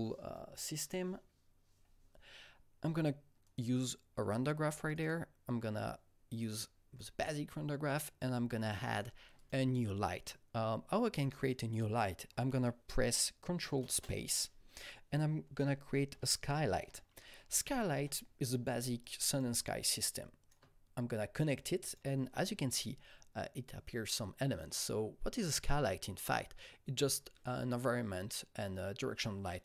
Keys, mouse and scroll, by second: 3.4-4.9 alt+drag, 5.0 double click, 5.8 click, 6.6-8.6 drag, 8.6 double click, 9.3 click, 13.5 ctrl+Num_Lock, 13.5 click, 13.8 ctrl+space, 15.5-16.4 typing, 17.9 Return, 19.0 click, 19.5-25.1 shift+drag.